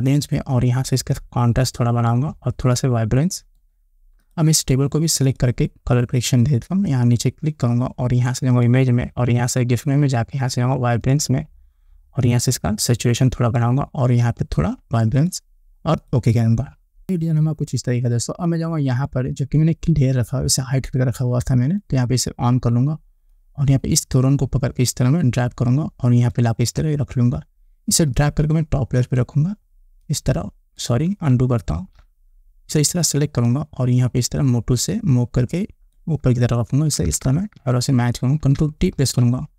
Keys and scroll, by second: 32.2 ctrl+z, 37.5 Up, 39.4 ctrl+t.